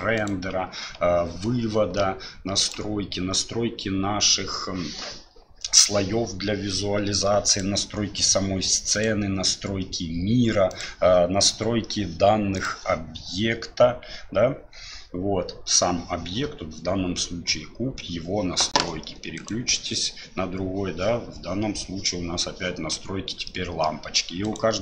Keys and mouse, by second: 2.6 click, 12.7 click, 19.3 right click, 23.5 middle click, 24.4 right click.